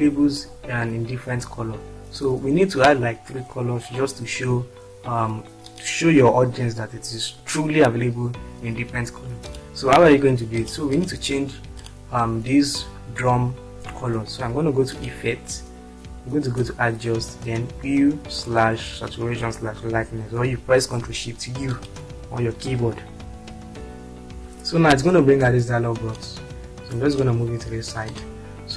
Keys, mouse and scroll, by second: 0.8-1.5 scroll down 2, 2.1-2.6 scroll up 2, 10.6 click, 23.4 click, 24.8 click.